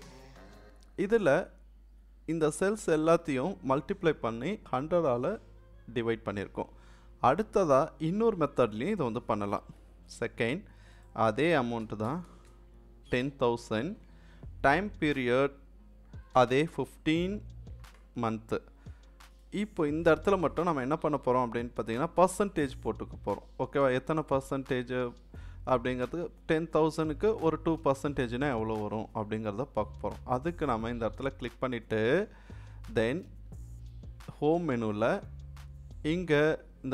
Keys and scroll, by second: 10.0 2, 11.6-12.5 typing, 16.3 1, 16.7 5.